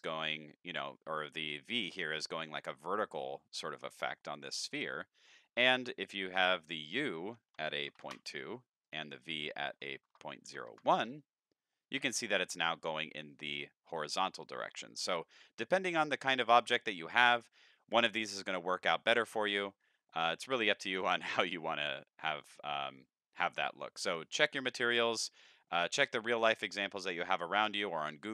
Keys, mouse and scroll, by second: 1.2 middle click, 2.3-3.8 middle drag, 3.8 middle click, 5.2 middle click, 6.6 click, 8.8 click, 9.6 KP_Decimal, 10.1 KP_0, 10.5 KP_1, 10.7 KP_Enter, 11.7 middle drag, 15.1 middle drag, 15.4-15.8 middle drag, 16.0 middle click, 16.6-17.3 middle drag, 17.6-18.2 middle drag, 18.6 middle click, 19.9 middle click, 22.5-22.9 middle drag, 24.3-24.6 middle drag, 25.0 middle drag, 25.7 middle click, 25.9-26.7 middle drag, 27.5-27.9 middle drag, 28.2 shift+middle drag.